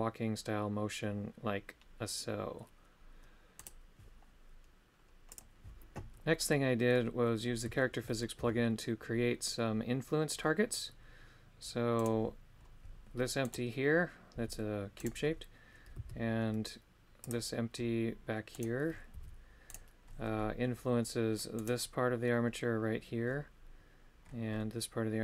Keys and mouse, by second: 6.4 middle click, 7.8 shift+middle click, 18.5 right click, 21.6 right click.